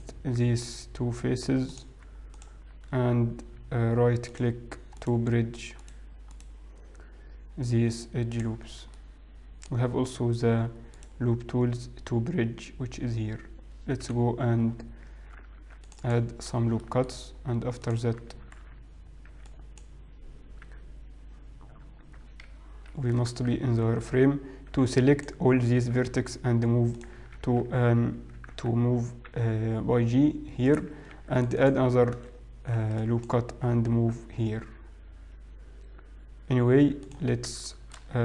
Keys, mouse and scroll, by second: 0.0 shift+click, 1.8 click, 3.0 shift+click, 4.4 click, 6.4 right click, 9.6 middle click, 9.6-11.0 scroll down 3, 11.0 right click, 14.4 KP_1, 14.7-15.6 scroll up 5, 15.6 ctrl+r, 17.5 shift+middle click, 17.5-18.4 scroll up 1, 18.4 click, 18.7 alt+a, 19.5 b, 20.7 g, 23.8 shift+z, 24.2 alt+a, 24.8 b, 27.5 g, 29.1 ctrl+z, 30.0 g, 31.6 ctrl+r, 32.8 alt+a, 32.9 b, 34.8 g.